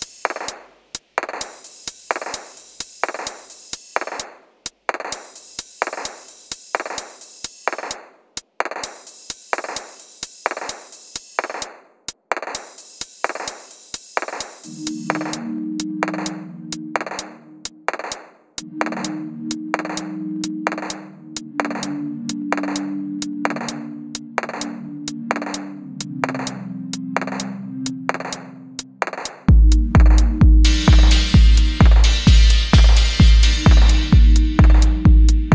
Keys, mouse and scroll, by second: 0.7 double click, 5.4 F4, 5.7 scroll down 1, 6.0-7.5 scroll up 1, 7.5-9.0 scroll down 1, 10.8 typing, 11.6-12.1 scroll up 1, 12.1-13.9 scroll, 13.6-14.8 typing, 15.8 F1, 16.5-17.3 typing, 19.3-20.1 typing, 21.8 F2, 22.4 F1, 22.9 middle click, 23.2-23.6 scroll up 1, 23.6 middle click, 28.6 typing, 31.1 shift+middle click, 31.4 F1, 31.8-32.3 scroll down 1, 32.3 middle click, 32.5-32.9 scroll up 1, 32.9-34.4 scroll down 1.